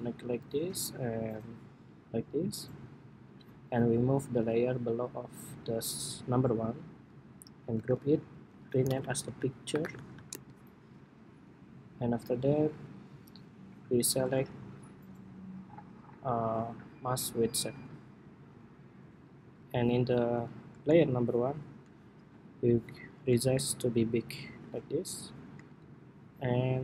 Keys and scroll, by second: 7.4 super+g.